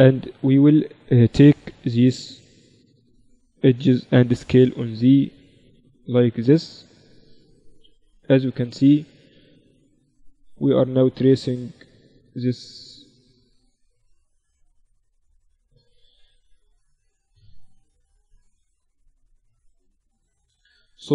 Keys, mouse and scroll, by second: 0.4 Escape, 0.8 a, 1.5 b, 4.1 s, 7.1-8.9 middle drag, 8.4 a, 8.9 a, 9.2 a, 10.2 b, 12.2-13.7 drag, 13.2 a, 13.7 middle click, 19.3 KP_7.